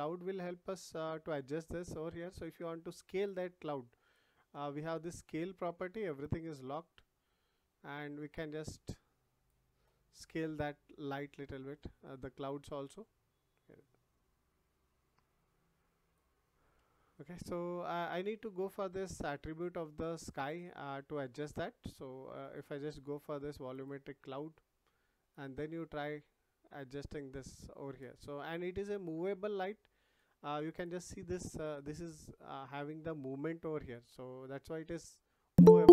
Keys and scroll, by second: 16.7 ctrl+z.